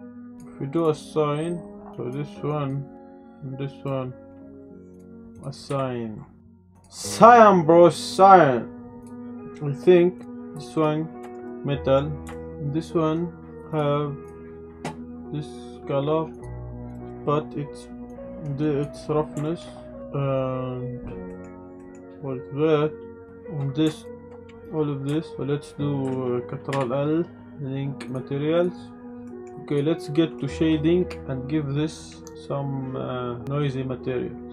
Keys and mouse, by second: 0.3 click, 0.7 click, 2.0 click, 2.5 click, 3.3 shift+click, 4.9 click, 5.3 click, 6.7 Tab, 6.7 drag, 7.3-9.0 drag, 9.0 ctrl+s, 10.2 click, 11.2 shift+drag, 11.4-11.9 drag, 12.3 shift+drag, 16.9 drag, 17.1 middle click, 18.1 click, 19.4 shift+middle drag, 21.3 middle click, 21.8 middle click, 24.0 shift+click, 25.1 shift+middle drag, 26.7 ctrl+l, 29.2 click, 30.0 ctrl+s, 30.0 click, 30.4 click.